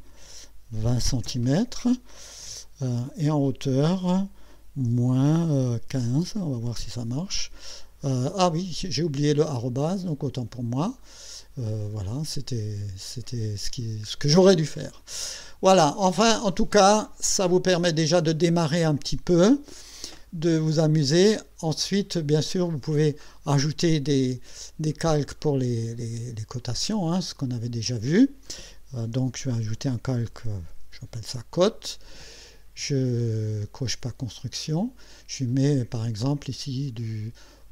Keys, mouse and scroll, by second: 0.1 -, 0.8 KP_2, 1.2 KP_0, 3.9 ,, 4.9 KP_Subtract, 5.9 KP_1, 6.2 KP_5, 7.0 Return, 10.8 click, 13.1 scroll up 2, 14.1-14.8 scroll down 4, 16.0 scroll down 2, 16.8 middle click, 17.4-18.1 scroll up 4, 18.4 scroll down 2, 27.2 click, 30.0-31.7 typing, 34.8 click.